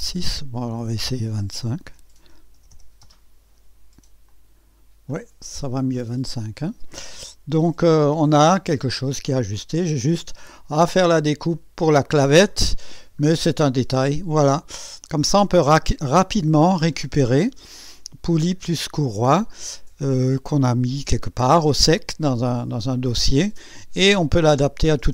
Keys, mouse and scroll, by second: 0.4 click, 1.5-3.0 typing, 4.3 click, 5.2 scroll down 1, 5.8 scroll down 1, 6.3-7.0 drag, 7.3-10.5 typing, 8.9 scroll up 1, 9.6 right click, 12.1-13.0 typing, 12.4 scroll up 1, 12.6-13.2 scroll down 2, 13.9-16.5 drag, 16.4-17.1 typing.